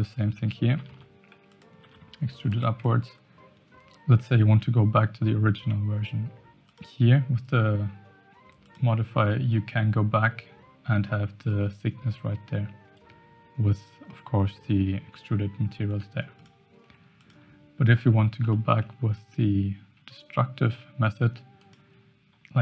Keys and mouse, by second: 0.8 i, 1.8 e, 2.8 Tab, 6.6 click, 8.6 click, 16.3 click, 17.9 click, 18.5 shift+middle drag, 21.3 Tab, 21.6 click.